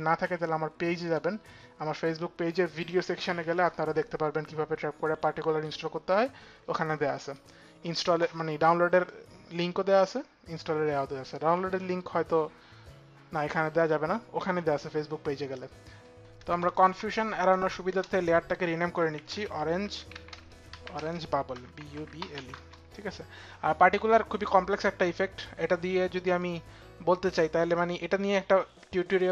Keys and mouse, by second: 0.0 BackSpace, 0.0 e, 6.9 click, 8.7 click, 17.1 click, 17.5 Return, 18.4-22.5 typing, 18.9 click, 25.4-26.1 typing, 26.0 click.